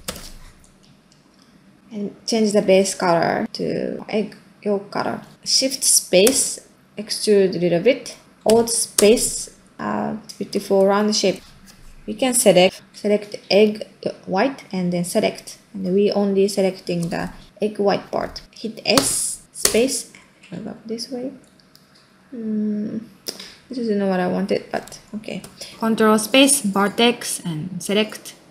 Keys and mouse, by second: 1.1 middle click, 5.3 Tab, 6.3 shift+space, 7.9 middle click, 8.9 alt+space, 10.6 ctrl+middle click, 11.4 ctrl+space, 11.6 middle click, 17.4 middle click, 22.2-24.8 middle drag, 25.4 ctrl+space.